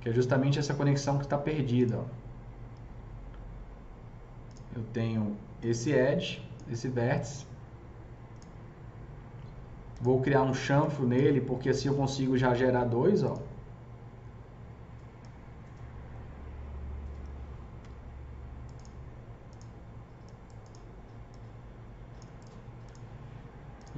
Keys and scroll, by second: 17.9 F3.